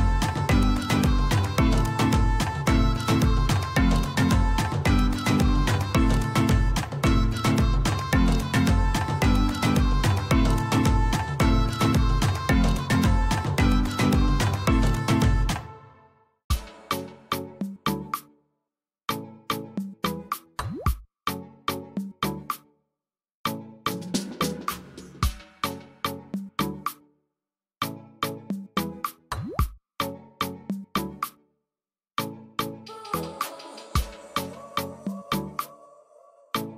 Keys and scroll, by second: 2.5 typing, 8.8-9.7 typing, 10.3 Return.